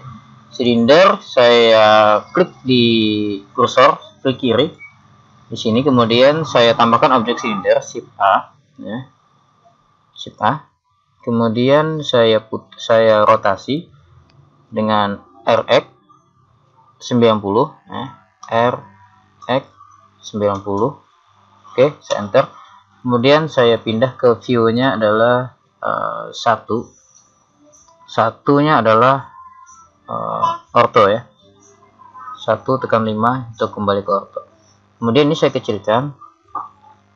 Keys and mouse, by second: 4.6 click, 7.9 shift+a, 18.4 r, 26.4 KP_1, 30.7 KP_5.